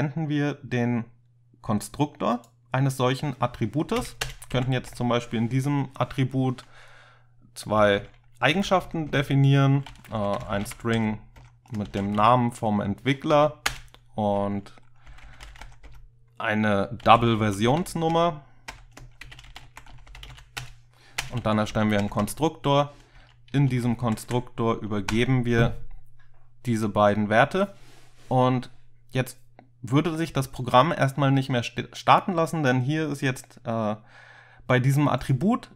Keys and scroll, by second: 4.0 Return, 4.3 Return, 4.6 Up, 4.9 Tab, 7.8-12.8 typing, 9.2 Tab, 11.5 Tab, 13.4 End, 13.7 Return, 14.9-22.0 typing, 18.8 Tab, 22.1 Tab, 22.3 Tab, 23.2 Up, 23.6 End, 23.9 Left, 24.1 Left, 24.3 Left, 25.2 Tab.